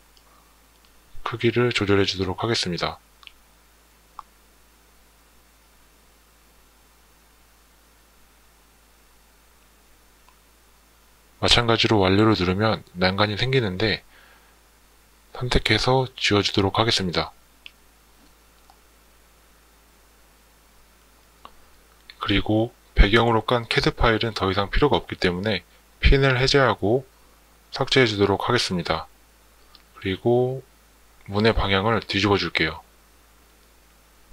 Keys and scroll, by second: 16.0 Delete, 26.9 Delete.